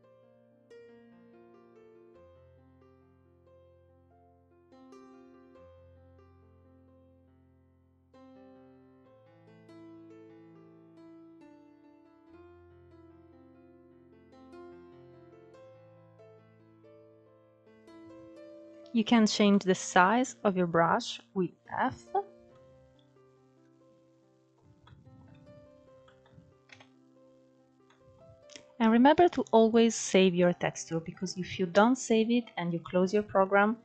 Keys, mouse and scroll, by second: 0.6 scroll up 2, 0.7 shift+middle click, 1.3 click, 1.8 middle click, 2.1 scroll down 2, 2.2 middle click, 2.7 click, 3.2 middle click, 3.5 click, 3.7 middle click, 4.0 click, 4.4 middle click, 4.6 scroll up 2, 4.8 middle click, 5.2 scroll down 5, 5.5-6.1 scroll up 1, 6.1 click, 6.4 shift+middle click, 6.9 scroll up 3, 7.0 middle click, 7.4-8.8 drag, 8.8-9.3 scroll down 3, 8.9 middle click, 9.3 middle click, 9.9 scroll up 2, 10.1 f, 10.5 scroll up 2, 10.6 click, 11.4 scroll down 2, 11.5 middle click, 11.7 scroll up 1, 12.0 f, 12.4 click, 13.3 scroll down 2, 13.4 middle click, 14.2-14.6 scroll up 4, 14.3 middle click, 14.6 middle click, 14.9 click, 15.4 scroll down 4, 15.5 middle click, 15.7-16.0 scroll up 3, 16.0 click, 16.3 shift+middle click, 17.0 click, 17.5 scroll down 2, 17.6 middle click, 18.3 scroll up 1, 18.6 f, 20.3 scroll down 1, 20.4-23.4 middle drag, 23.4-23.9 scroll up 1, 23.9 middle click, 24.6 KP_1, 25.4-25.7 scroll up 1, 25.7-27.4 shift+middle drag, 27.4-30.4 drag, 31.3 scroll up 2.